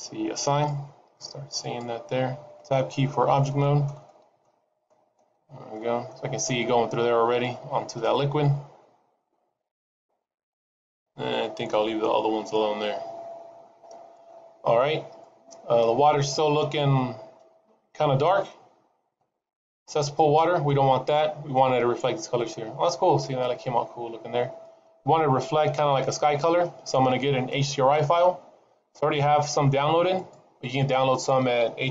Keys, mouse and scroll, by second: 0.3 click, 1.5 click, 2.8 Tab, 3.3 shift+middle click, 4.0 middle click, 4.8 middle click, 5.3-5.7 scroll up 2, 5.7 middle click, 8.6-9.1 scroll down 6, 11.0-12.3 scroll down 2, 12.3-13.8 scroll up 10, 13.8 scroll down 2, 14.1 middle click, 15.1 middle click, 17.9 middle click, 19.7 scroll up 1, 20.5 middle click, 24.1 scroll down 1, 24.5 middle click, 25.7 middle click.